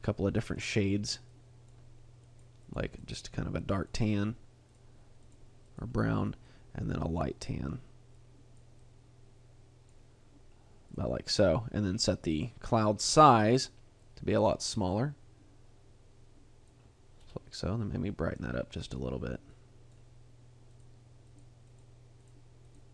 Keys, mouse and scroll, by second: 0.5 click, 5.2 click, 5.6 click, 11.4-12.1 scroll down 1, 12.1-12.6 scroll down 2, 13.5-14.0 scroll down 3, 14.0 click, 17.2-18.0 scroll up 1, 18.0 scroll up 1, 18.2 click, 18.8 click, 21.3 click, 21.7 click, 22.7 click.